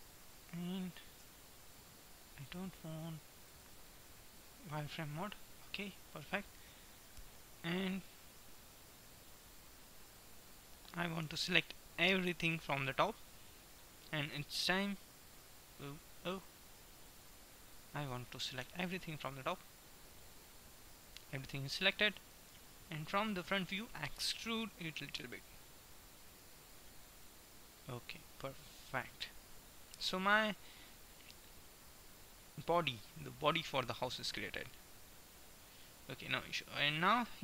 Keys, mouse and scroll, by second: 1.3 z, 4.3 middle click, 5.1-6.3 drag, 6.8 KP_1, 11.3 b, 12.1-13.8 middle drag, 15.4 middle click, 16.4 KP_1, 17.8-19.4 drag, 18.8 b, 20.4 click, 22.4 KP_1, 24.9 e, 27.6-28.9 middle drag, 35.4 Tab, 37.3-37.4 middle drag.